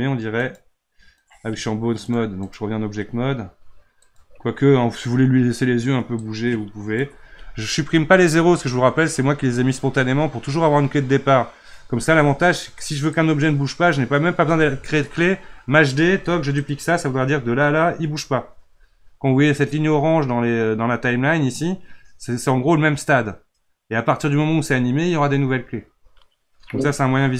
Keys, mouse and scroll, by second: 0.4 click, 1.2 click, 2.0-4.2 drag, 6.2-8.3 drag, 8.3 Delete, 13.1-15.9 drag, 15.9 shift+d.